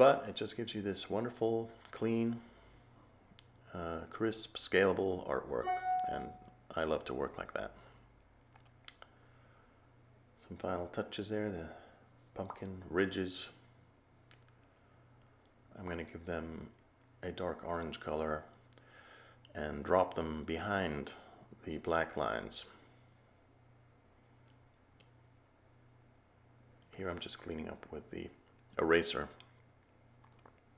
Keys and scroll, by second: 22.5 a.